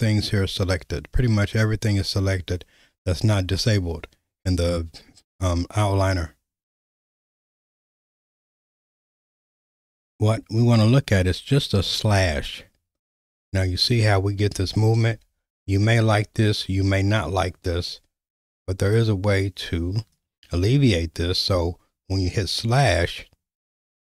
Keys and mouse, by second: 8.5 click, 12.1 /, 13.8 /, 14.5 /, 15.1 /, 19.0-20.2 drag.